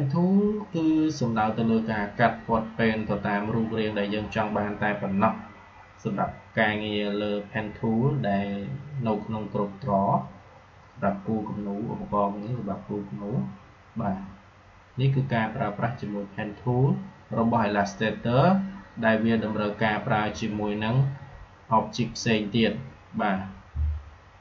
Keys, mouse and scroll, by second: 22.2 click.